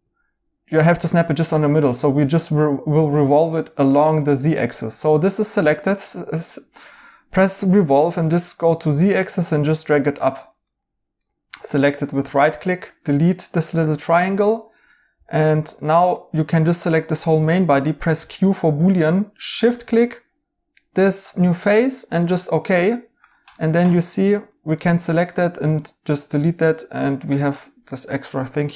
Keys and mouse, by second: 2.0 right click, 10.6 right click, 12.6 2, 13.5 2, 13.6 right click, 15.1 alt+z, 15.6 Tab, 15.9 right click, 18.1 q, 23.5 right click, 24.8 right click, 24.8 x, 27.8 right click, 28.5 2.